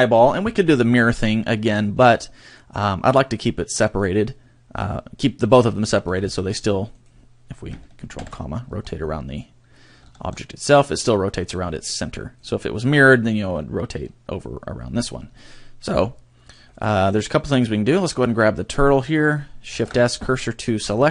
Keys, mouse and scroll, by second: 6.0 r, 7.0 right click, 8.1 ctrl+,, 10.0 r, 12.4 right click, 17.9 right click, 19.8 shift+s.